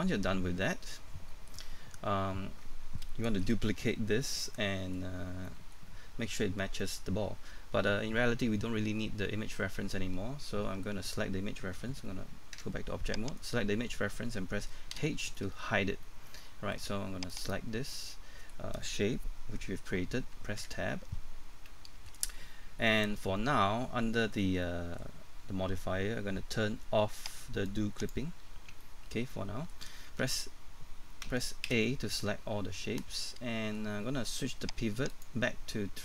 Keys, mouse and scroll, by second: 2.0 scroll down 1, 2.3-2.9 scroll up 1, 2.9-3.7 scroll down 1, 5.2 scroll down 1, 5.5 middle click, 12.6 Tab, 13.4-14.4 right drag, 14.9 h, 15.5-15.9 scroll up 1, 16.0 middle click, 17.3 right click, 17.7 scroll down 1, 17.9 middle click, 20.6 Tab, 21.2 scroll up 1, 23.5-24.2 scroll up 1, 24.6 middle click, 27.7 click, 28.8 middle click, 31.2-31.7 typing, 32.6 scroll down 1, 32.9 middle click, 35.1 click.